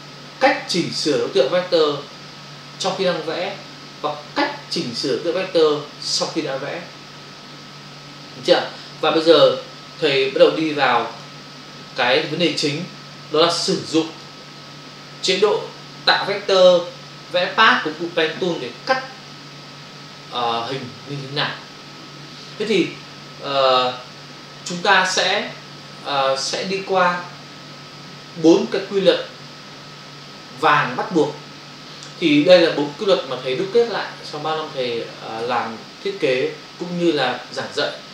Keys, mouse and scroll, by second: 11.2 click, 14.0 click, 14.2 click, 16.8 v.